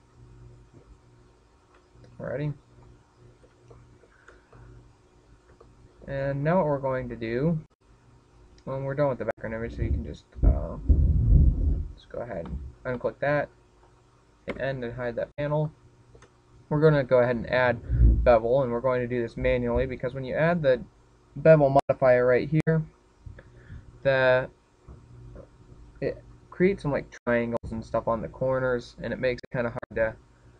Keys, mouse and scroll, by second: 2.4 click, 3.2-4.1 scroll down 8, 4.5 shift+middle click, 5.3 middle click, 6.4 shift+middle click, 13.3 click, 13.8 click, 15.3 n, 16.5 shift+middle click, 21.9 click, 22.5 click.